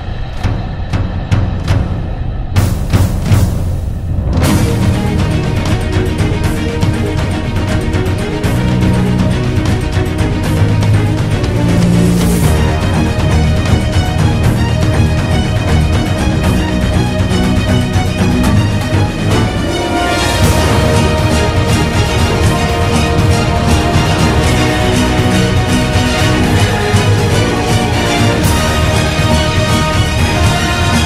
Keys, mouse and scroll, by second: 1.6 right click, 2.4 ctrl+z, 5.2 ctrl+z, 5.6 ctrl+z, 11.8 f, 12.6 b, 13.2 ctrl+z, 14.1 ctrl+-, 14.5 ctrl+=, 16.2 ctrl+z, 23.6 ctrl+z, 27.8 f, 28.4 b, 30.1 ctrl+z.